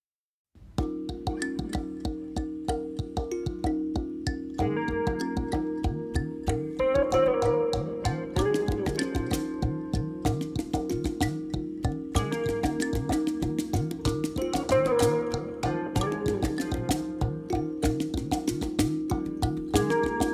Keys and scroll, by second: 9.2 0, 9.4 ., 10.2 0, 10.4 2, 10.7 Return, 15.2 0, 15.4 ., 15.8 0, 17.2 Return.